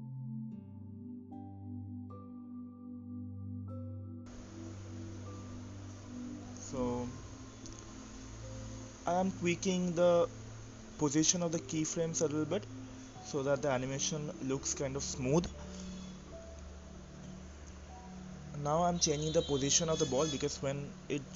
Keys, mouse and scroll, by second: 0.9-6.2 drag, 13.9-15.5 drag, 15.5 ctrl+z, 15.8 click, 16.5 click, 19.2-21.1 drag, 21.1-21.3 scroll down 4.